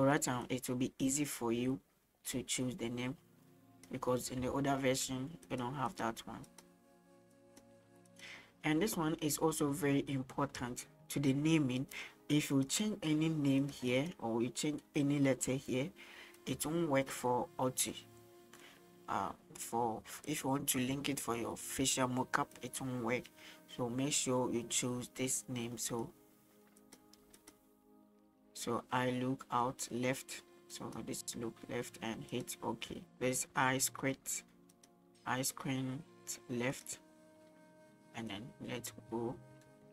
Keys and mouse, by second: 0.5-4.0 drag, 4.6 shift+middle click, 6.1-8.3 drag, 12.8 click, 13.9-16.5 drag, 17.4 middle click, 22.6-26.2 drag, 27.0-32.4 drag, 33.0 middle click, 33.0-36.9 drag, 38.3-39.9 drag.